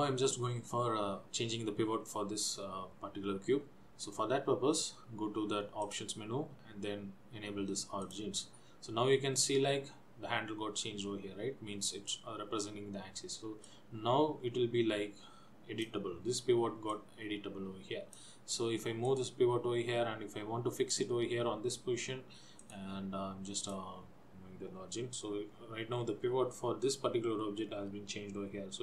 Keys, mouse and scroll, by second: 6.0 click, 13.8 click, 17.0 click, 19.2 click, 22.8 click, 25.6 Left.